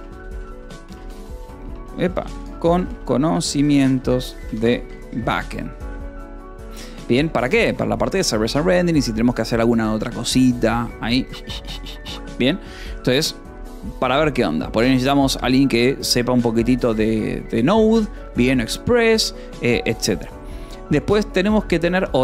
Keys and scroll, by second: 0.0-7.6 typing, 21.5-22.2 typing.